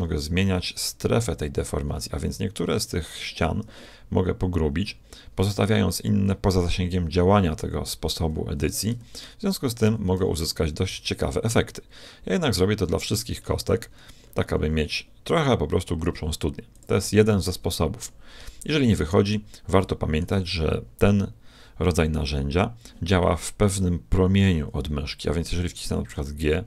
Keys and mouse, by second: 9.9 s, 17.2-19.0 middle drag, 19.2-21.5 middle drag, 26.0 g.